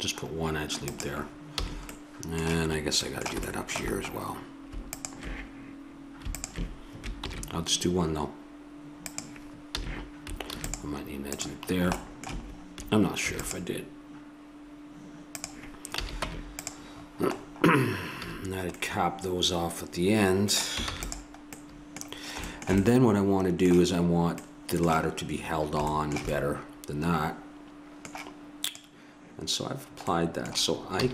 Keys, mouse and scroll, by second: 1.5 a, 1.9 middle click, 4.9-7.2 drag, 7.2 ctrl+b, 9.7 a, 10.5 ctrl+r, 12.5-15.3 drag, 13.3 ctrl+r, 15.9 a, 16.3 Tab, 16.7 right click, 18.3 a, 20.9 ctrl+s, 26.1-28.5 middle drag, 28.7-31.0 drag, 31.0 a.